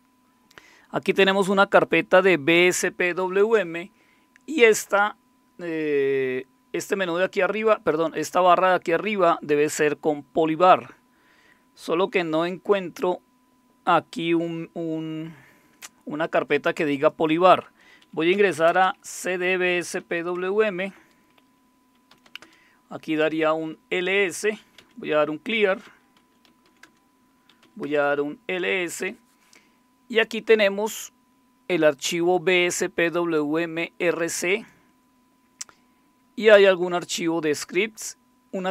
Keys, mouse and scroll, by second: 1.4-2.8 drag, 16.9 click, 18.1-20.5 typing, 21.0 Return, 21.8-22.6 typing, 24.5-29.5 typing, 31.9-33.4 drag, 34.5 click, 36.9 click.